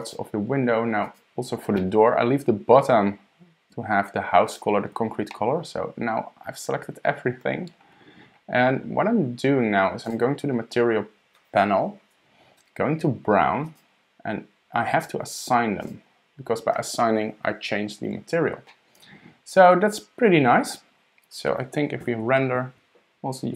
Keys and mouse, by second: 0.0 shift+click, 1.0 shift+click, 1.8 click, 1.9-2.8 middle drag, 5.3-7.4 middle drag, 10.0 click, 13.6 click, 15.8 click, 18.7-19.9 middle drag.